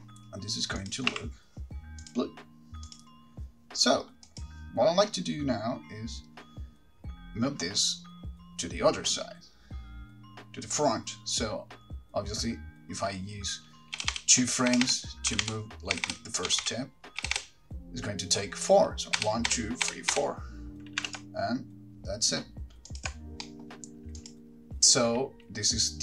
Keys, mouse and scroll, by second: 1.0 click, 2.3 r, 3.1 click, 4.6 click, 14.2 Left, 14.4 Left, 14.9 Right, 15.0 Right, 15.5 Left, 15.6 Left, 16.1 Right, 16.7 Left, 16.7 Right, 16.8 Left, 17.4 Right, 17.5 Right, 19.4 Right, 19.7 Right, 20.2 Right, 20.4 Right, 21.2 g, 23.2 ctrl+click, 23.6 middle click, 24.4 click.